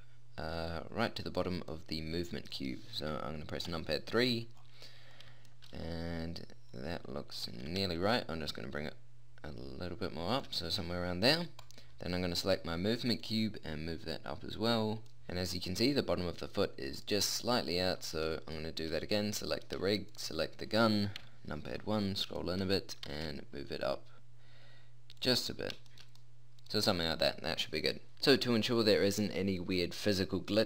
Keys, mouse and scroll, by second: 1.7 middle click, 3.7 KP_3, 7.5 g, 7.9 middle click, 11.6-13.2 drag, 17.3-21.2 middle drag, 21.2 KP_1, 21.7 middle click, 23.0 g, 24.3 middle click, 28.1-30.6 middle drag.